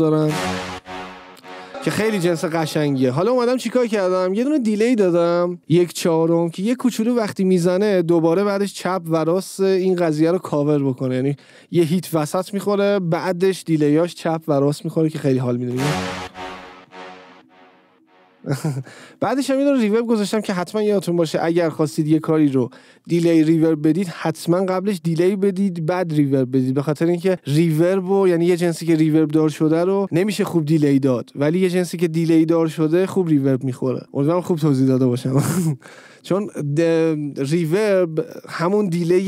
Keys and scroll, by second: 0.4 space, 1.7 space, 15.8 space, 19.1 space.